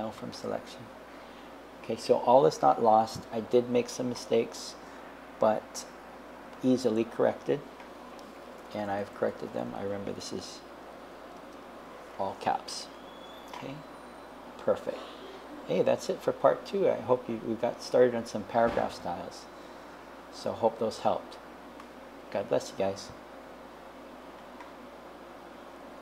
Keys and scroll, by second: 7.9 Right, 8.5 BackSpace, 10.0-11.7 typing.